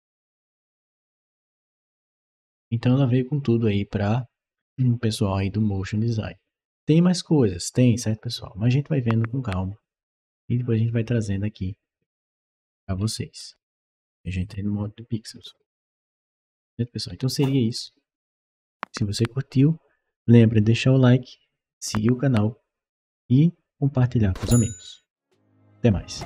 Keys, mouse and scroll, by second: 0.1-1.5 right drag, 10.1-12.1 right drag, 12.4-13.0 scroll up 2, 13.0-13.3 scroll up 2, 13.5 scroll down 2, 14.1-17.2 right drag, 15.2-17.6 typing, 17.5 right click.